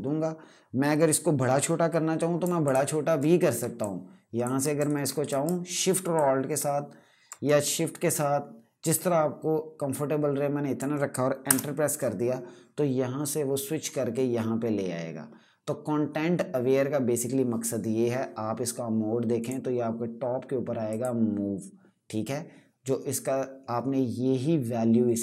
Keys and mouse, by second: 2.1 alt+Num_Lock, 2.3 alt+click, 3.5 alt+click, 4.6 z, 5.9 alt+click, 11.2 Return, 19.1 click.